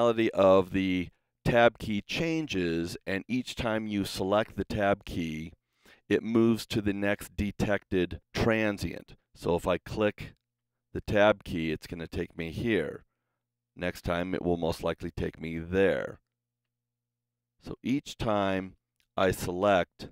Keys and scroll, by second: 10.6 Tab, 16.6 Tab.